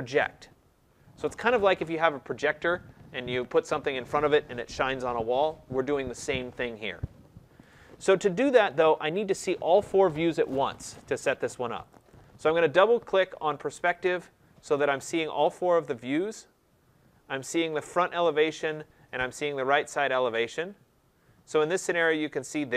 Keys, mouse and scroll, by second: 7.7 click, 11.8 click, 12.0 click, 14.7-15.0 scroll down 2, 15.5-16.8 scroll down 10, 16.8 scroll down 1, 18.3-18.7 scroll down 2, 18.7-19.8 scroll, 20.6 scroll, 21.2 scroll.